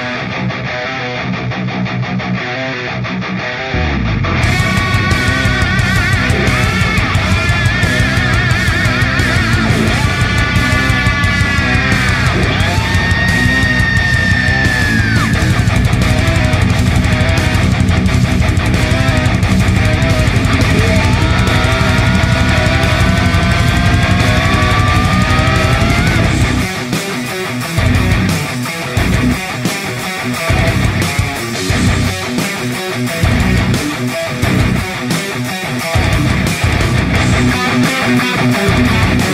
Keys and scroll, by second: 7.4-9.4 space, 10.4 space, 19.7 v, 20.4 ctrl+space, 20.6 v, 26.1 v, 28.4-29.7 space.